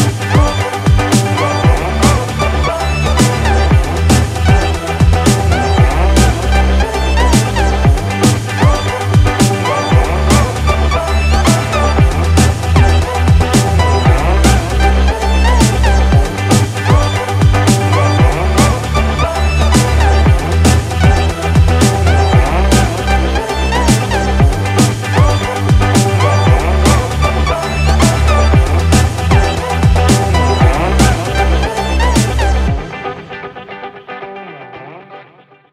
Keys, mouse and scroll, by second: 0.8 click, 3.0 click, 10.2 click, 12.0 click, 14.7 click.